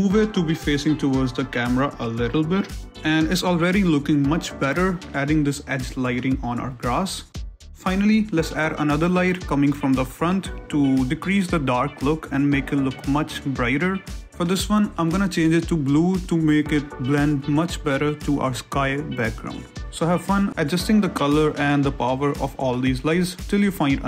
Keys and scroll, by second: 0.0 shift+z, 1.1-2.8 typing, 7.2 shift+z, 8.8-14.9 typing, 9.2 Return, 14.1 Return, 16.2 ctrl+z, 21.5 6, 21.6 Return, 22.1 r, 22.8 shift+z, 23.6 r.